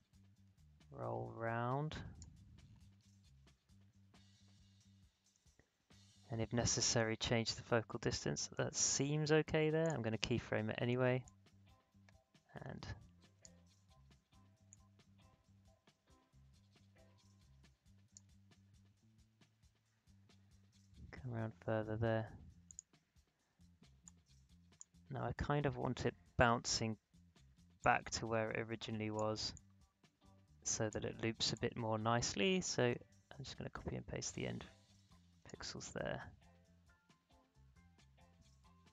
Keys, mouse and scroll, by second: 9.8-21.6 drag, 22.6-27.8 drag, 27.8-32.9 alt+drag, 32.9 ctrl+c, 33.1 ctrl+v, 34.3 click, 35.4 space.